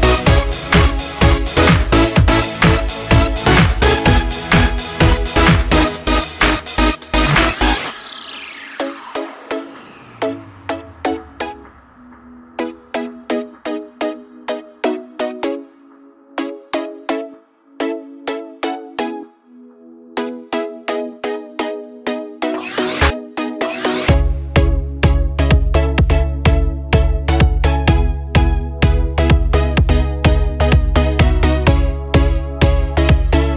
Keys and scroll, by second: 5.0 |, 9.6 |, 13.9 ctrl+z, 31.8 ctrl+z.